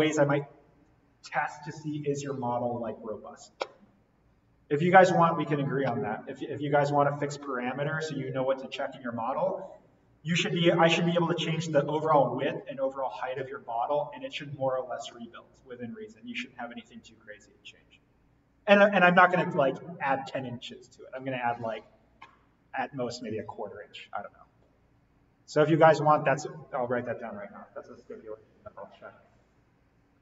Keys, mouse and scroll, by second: 25.5 click.